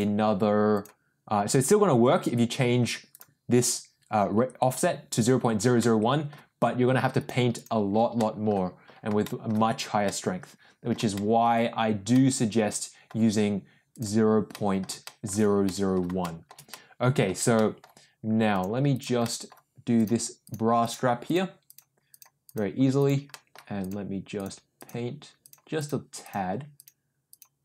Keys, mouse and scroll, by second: 0.7 click, 3.1 click, 5.8 middle click, 7.1 click, 7.5 click, 8.1 middle click, 9.2 shift+middle click, 10.0 middle click, 11.1 shift+middle click, 12.1 middle click, 13.9 click, 14.5 middle click, 15.0 shift+middle click, 15.6 middle click, 16.2 shift+middle click, 16.7 middle click, 17.5 middle click, 18.5 click, 18.9 click, 19.2 middle click, 19.9 click, 20.4 click, 20.8 click, 21.2 click, 21.6 click, 22.1 click, 22.4 click, 22.9 click, 23.3 middle click, 23.8 click, 24.3 click, 24.7 click, 25.4 click, 25.7 click, 26.2 click, 26.7 click, 27.2 click.